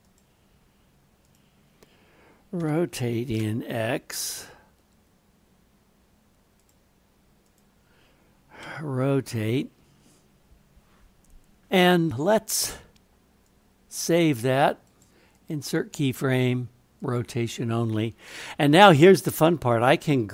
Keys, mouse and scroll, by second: 2.6 r, 7.4 click, 8.6 r, 13.5 click, 14.9 right click, 17.2 right click, 19.0-20.3 drag.